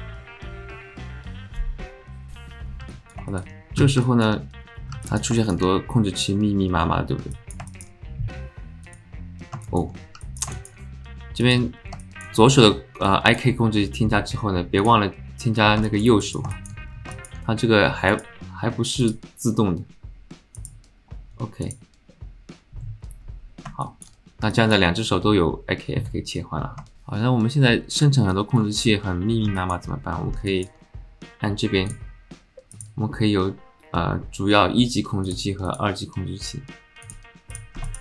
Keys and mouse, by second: 2.9 alt+drag, 3.3 alt+shift+click, 4.0 alt+click, 5.0 alt+click, 5.4 shift+middle click, 5.6-7.1 middle drag, 7.3 alt+middle click, 7.7 shift+middle drag, 9.7 alt+shift+click, 10.2 alt+click, 10.6 alt+shift+click, 11.4-12.2 drag, 13.0-13.4 alt+shift+middle drag, 14.9 click, 15.8 alt+shift+middle click, 16.2 click, 16.5 shift+middle click, 17.1 alt+shift+middle click, 18.1 click, 19.0-22.4 drag, 23.8 shift+middle click, 24.5 alt+middle click, 28.0 alt+middle click, 28.6 alt+shift+middle click, 29.6 alt+middle click, 30.5 alt+middle click, 31.9-33.0 drag, 35.3 click, 35.7 click, 37.0 click, 37.8 shift+click.